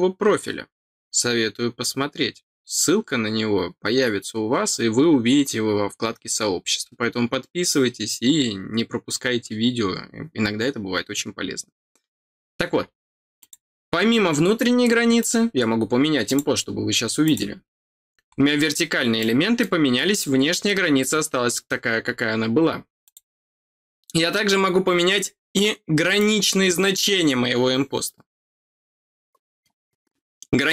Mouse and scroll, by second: 13.3 click, 15.1 click, 16.2 click, 17.2 click, 18.3 scroll down 1, 19.1 middle click, 22.0 scroll down 2, 23.0 click, 26.1 click.